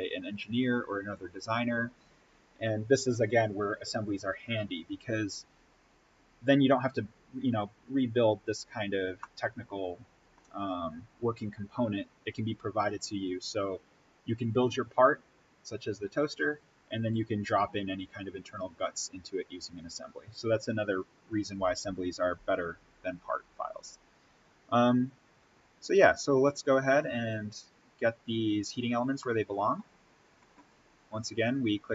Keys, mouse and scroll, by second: 9.1-12.7 middle drag, 24.3-25.1 scroll down 1, 26.6-28.5 drag, 29.1-29.4 scroll up 1, 29.4-31.2 middle drag, 31.2 click.